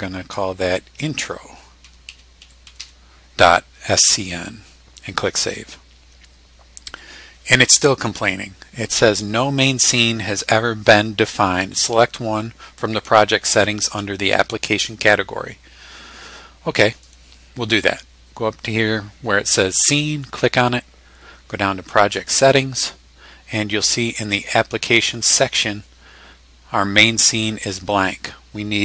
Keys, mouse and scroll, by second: 1.6-3.3 typing, 5.3 click, 16.9 click, 20.2 click, 22.1 click.